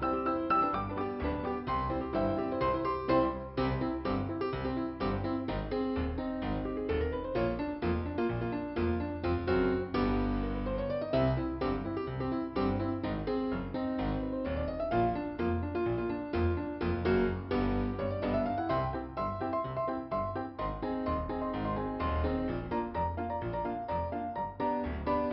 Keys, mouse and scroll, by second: 0.2 click, 0.7 click, 0.9 click, 1.4 right click, 5.1 click, 6.3 click, 7.0 click, 8.0 click, 8.6 click, 9.0 click, 9.1 double click, 11.9 ,, 12.3-12.9 scroll up 1, 15.7 click, 17.2 middle click, 19.6 click, 21.2 click, 21.9 click, 23.6 scroll down 2.